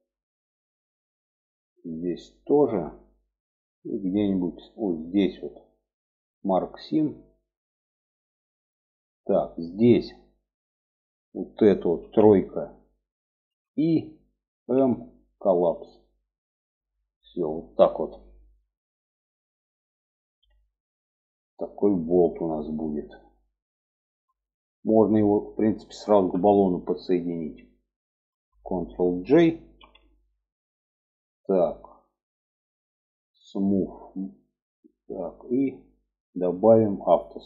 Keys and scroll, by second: 11.4 3, 12.8 i, 14.1 m, 25.5 Tab, 29.2 ctrl+j.